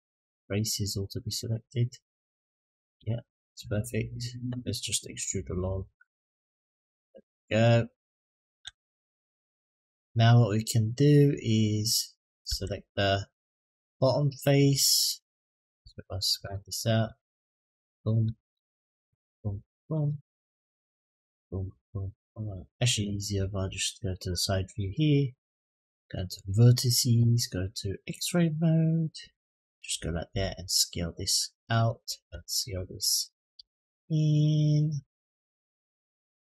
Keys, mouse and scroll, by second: 0.1-2.4 middle drag, 3.5 middle click, 4.5 middle click, 5.2-7.4 drag, 8.8 Tab, 8.8-9.5 middle drag, 12.2 Tab, 13.9 click, 14.2 middle click, 14.8 click, 16.2 ctrl+KP_Add, 17.6 click, 18.5 shift+click, 19.0 shift+click, 19.6 shift+click, 19.9 middle click, 21.0 shift+click, 21.5 shift+click, 21.9 middle click, 24.5 click, 26.1 click, 28.0 click, 28.4 click, 29.2 click, 30.1 s, 32.7 click, 33.3 s.